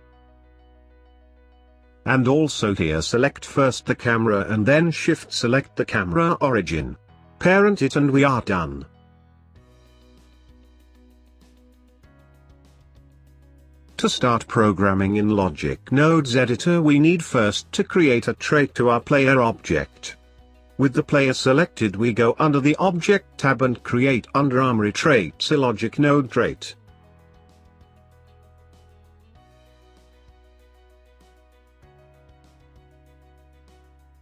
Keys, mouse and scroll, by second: 0.8 n, 1.4 click, 3.5 shift+click, 4.8 ctrl+p, 7.2 click, 7.9 g, 9.9 click, 10.3 click, 10.8 g, 12.7 alt+F9, 17.7-19.5 scroll up 1, 19.5 click, 20.6 click, 21.0 click, 22.9-29.6 drag.